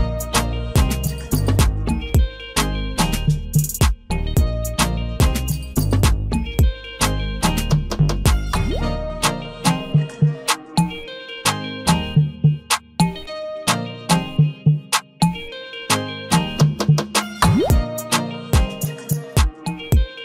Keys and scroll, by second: 6.0 ctrl+a, 8.8 ctrl+d.